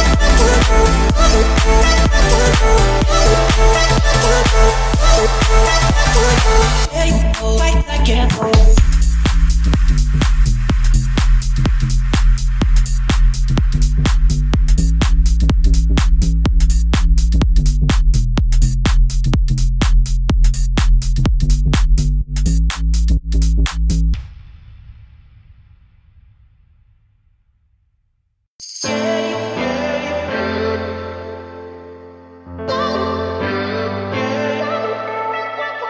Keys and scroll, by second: 1.1 Return, 3.6 8, 3.9 Return, 7.0 7, 7.4 Return, 12.6 o, 14.7 Escape, 15.9 Escape, 16.9 Escape, 18.1 Escape, 22.7 1, 23.5 BackSpace, 24.0 7, 24.4 Return, 25.8 Escape, 26.2 o, 27.5 Escape, 28.7 Escape.